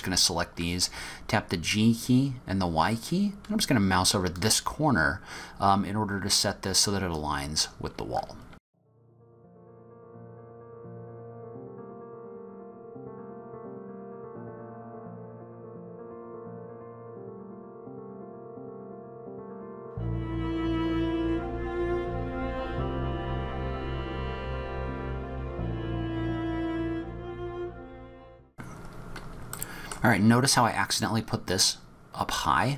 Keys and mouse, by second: 7.2 click, 8.5 g, 9.5 g, 9.7 e, 11.5-20.8 typing, 11.9 shift+click, 13.8 click, 15.0 click, 15.9 click, 16.8 click, 17.7 click, 19.7 click, 21.9 Tab, 22.1 shift+middle click, 22.6-27.5 typing, 22.9 Tab, 23.1 click, 23.8 click, 24.3 click, 24.7 click, 25.9 click, 27.1 click, 27.8 middle click, 27.9 click, 28.1 middle click, 28.4 middle click, 29.6 middle click.